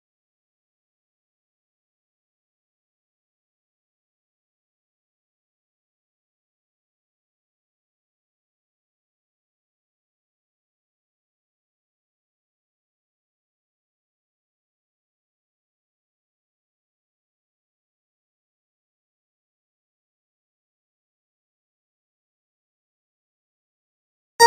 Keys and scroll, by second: 1.9 Delete, 7.5 ctrl+a, 8.0 ctrl+c, 15.3 ctrl+v, 21.4 ctrl+v.